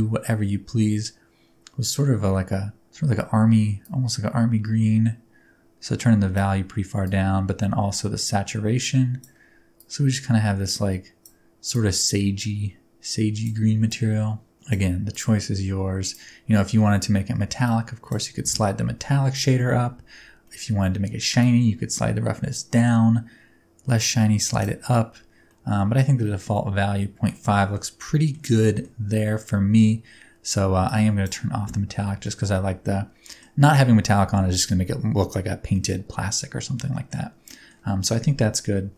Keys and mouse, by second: 17.6 click, 20.5 middle click, 21.5-24.8 drag, 25.5-26.0 middle drag, 26.6-27.4 middle drag, 27.6 shift+middle drag, 28.1 middle drag, 28.6 shift+middle drag, 30.8-31.3 drag, 32.2 shift+middle click, 32.7-33.4 middle drag, 35.9-37.2 middle drag, 37.5 middle drag.